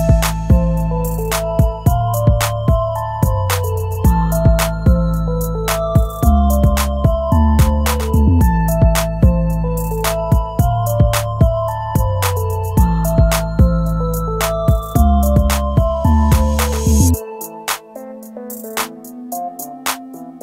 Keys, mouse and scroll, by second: 0.5 scroll down 1, 7.6-8.9 scroll down 1, 8.9 scroll up 1, 15.0-15.5 scroll down 1, 15.5 scroll up 1.